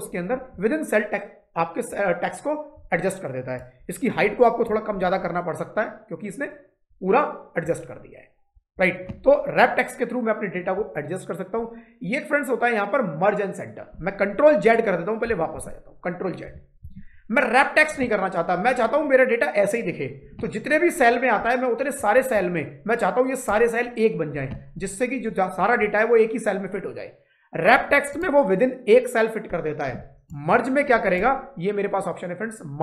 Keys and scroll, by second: 15.4 ctrl+z, 16.7 ctrl+z.